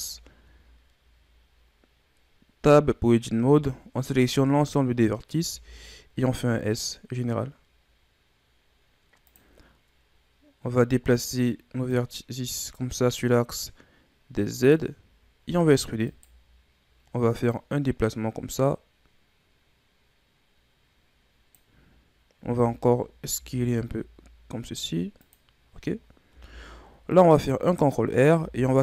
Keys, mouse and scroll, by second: 0.1-1.3 shift+scroll up 6, 3.4 a, 5.5 s, 11.9-14.9 drag, 15.5 e, 17.5-20.5 drag, 22.4 a, 22.6 a, 23.3 s, 26.3 ctrl+r, 28.4 s.